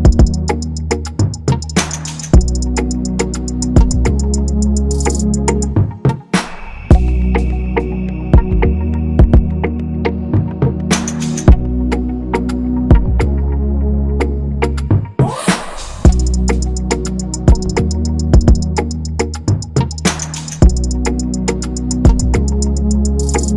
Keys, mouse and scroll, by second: 4.4 ctrl+z, 10.2 ctrl+-, 10.3 ctrl+-, 10.5 ctrl+-, 10.8 ctrl+-, 10.9 ctrl+-, 15.7 ctrl+=, 17.5 ctrl+-, 17.9 ctrl+-, 19.3-19.8 scroll, 19.8-20.7 scroll up 1, 21.5 double click, 21.8 BackSpace, 23.3 shift+click.